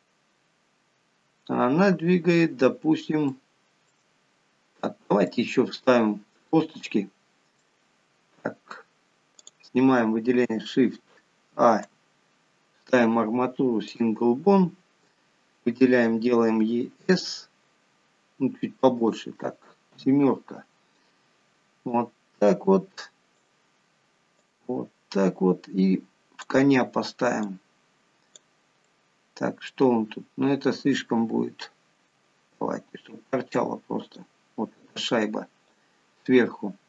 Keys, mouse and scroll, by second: 3.5 shift+middle click, 4.4 scroll up 5, 5.0 middle click, 6.5 scroll down 3, 6.9 middle click, 9.6 click, 11.9 shift+a, 16.9 s, 20.2 KP_7, 22.1 click, 24.7 click, 27.7 click, 29.1 middle click, 32.2 s, 35.9 click.